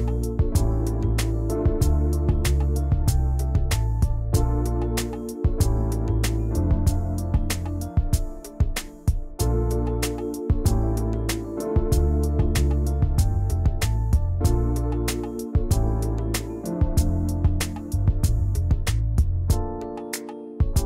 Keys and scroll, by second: 8.0 ctrl+c, 8.6 ctrl+shift+v, 14.9 ctrl+c, 18.7 ctrl+[, 20.7 ctrl+[.